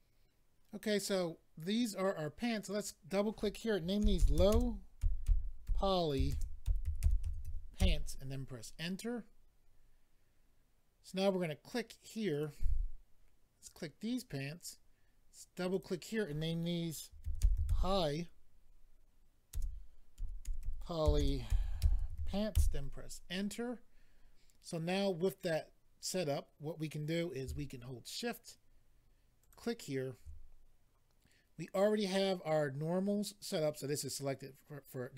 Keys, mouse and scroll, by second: 0.0 click, 2.5 click, 2.6 click, 2.6 click, 2.8 click, 4.0-7.4 typing, 7.7 Return, 12.3 click, 13.7 click, 15.5 click, 15.6 click, 15.7 click, 15.8 click, 17.2 typing, 19.0-22.2 typing, 22.5 Return, 29.4 shift+click.